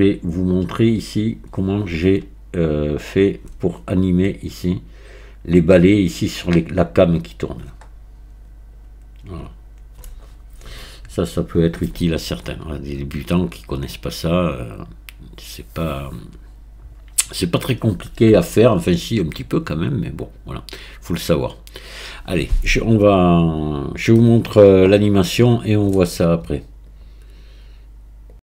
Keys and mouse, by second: 21.7 click.